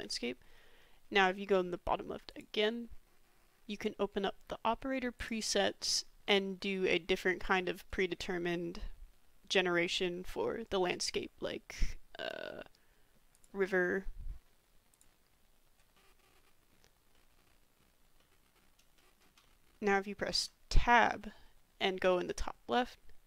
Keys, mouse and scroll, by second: 2.3 click, 5.3-12.5 drag, 12.9 click, 15.9-16.7 drag, 17.1 click, 18.3-18.7 drag, 18.9 shift+drag, 19.5-19.9 drag, 19.9 middle click, 20.3 Tab, 21.0-23.2 middle drag.